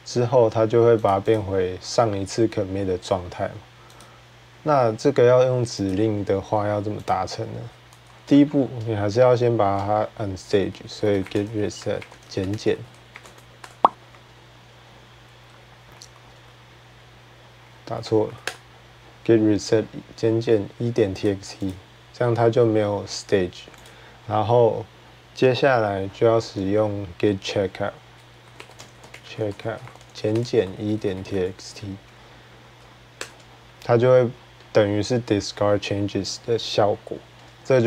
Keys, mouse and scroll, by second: 0.9 click, 1.1 click, 3.8 click, 5.7 click, 6.9 click, 7.4-7.8 typing, 8.9 typing, 10.6-12.1 typing, 13.3-14.0 typing, 18.3-22.3 Return, 19.4 click, 21.1 click, 21.7-22.3 drag, 23.6 click, 28.0-31.5 typing, 33.0 Return, 33.0-33.8 typing, 37.5 click.